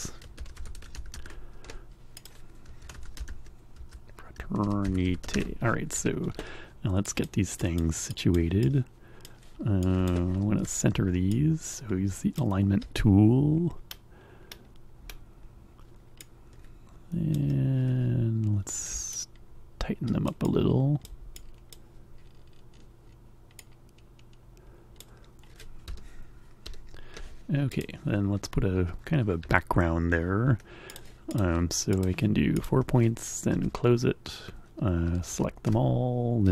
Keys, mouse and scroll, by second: 0.2-6.0 typing, 2.3 click, 7.2 click, 7.7 click, 8.2 click, 8.8 click, 10.0 click, 10.7 a, 11.4-12.7 ctrl+drag, 16.2-17.6 drag, 19.1-21.3 ctrl+drag, 21.5 click, 23.5-25.3 drag, 25.8 Escape, 27.8 click, 29.0 F5, 30.9 click, 31.4 click, 32.0 click, 32.6 click, 33.6 c, 34.0 a, 35.7 a.